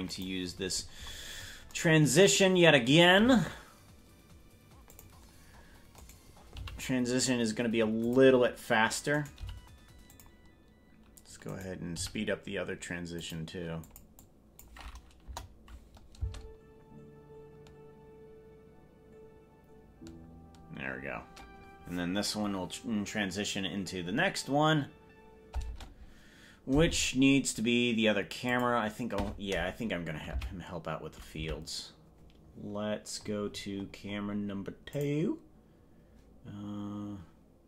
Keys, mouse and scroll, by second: 0.6-1.8 scroll up 25, 3.2 g, 6.0 right click, 6.6 g, 9.2 right click, 9.4 g, 11.6 right click, 12.0 g, 13.8 click, 14.2 click, 15.2 KP_0, 16.2 space, 25.8 space, 28.5 click, 30.4 Left, 31.4 Left, 33.2-34.4 scroll up 25, 34.9 click.